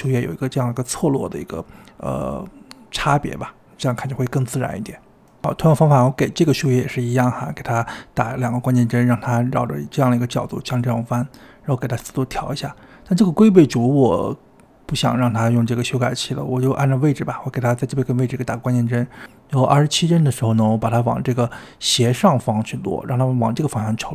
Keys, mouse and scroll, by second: 0.6 space, 1.7-7.0 drag, 7.1 i, 7.8 ctrl+z, 8.2 click, 9.7 click, 10.6 space, 10.9 space, 11.0 click, 11.6 click, 14.8-18.6 drag, 18.6-20.2 scroll down 3, 18.7-21.9 middle drag, 21.9 g.